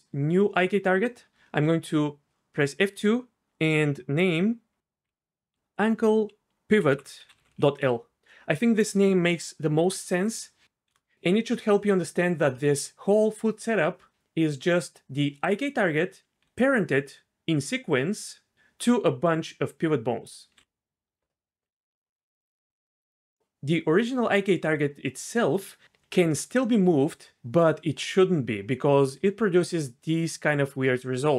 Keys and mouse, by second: 1.3 F2, 15.4 click, 16.4-20.5 d, 21.7-22.9 d, 26.2 g.